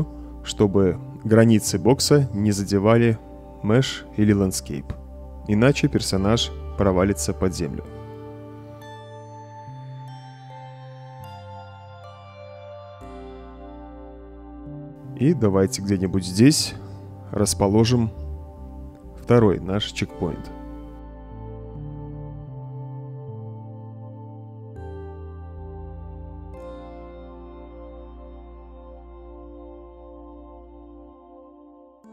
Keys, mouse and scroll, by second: 0.7 click, 1.6 right click, 1.9 space, 2.2 click, 2.7 click, 3.0 right click, 3.0 d, 3.5 click, 3.8 right click, 4.1 right click, 4.1 w, 4.5 s, 5.0 click, 5.4 right click, 5.6 a, 5.9 s, 7.2-8.5 drag, 8.5-15.9 typing, 8.6-21.0 right drag, 17.0 w, 17.8 a, 18.8 d, 21.6 click, 22.0 click, 22.3 click, 22.6 click, 22.7 click, 22.9 click, 23.9 right click, 24.0-25.3 typing, 24.3 right click, 25.7 click, 26.3 right click, 26.9 click, 27.4 click, 27.7 right click, 28.1 click, 28.5 right click, 28.6 d, 28.9 a, 29.2 right click, 29.4 click, 29.8 click, 30.1 click, 30.2-32.1 typing, 30.4 right click, 30.9 click, 31.4 click, 31.9-32.1 right drag.